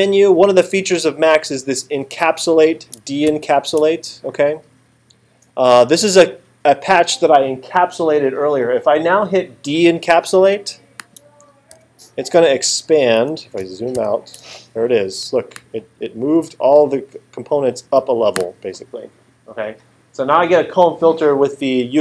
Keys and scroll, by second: 3.3 alt+super+8, 11.7 8, 14.0 alt+super+8.